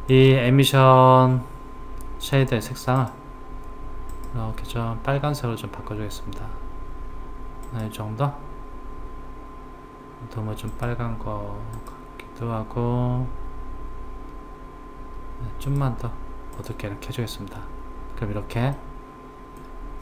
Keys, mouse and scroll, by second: 0.1 click, 3.0 click, 18.8-20.0 middle drag.